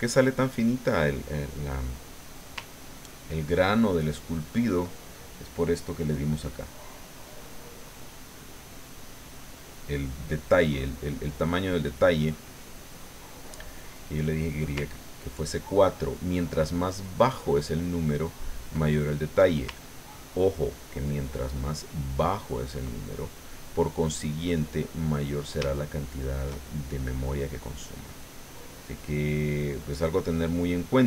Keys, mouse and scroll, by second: 1.4 middle click, 2.9-4.9 ctrl+drag, 6.7-8.2 drag, 10.8-14.6 middle drag, 15.0-18.8 ctrl+drag, 18.8 ctrl+middle click, 19.9-22.9 ctrl+drag, 23.0 ctrl+middle click, 24.1-27.5 middle drag, 28.3-29.7 drag, 30.0-31.0 drag.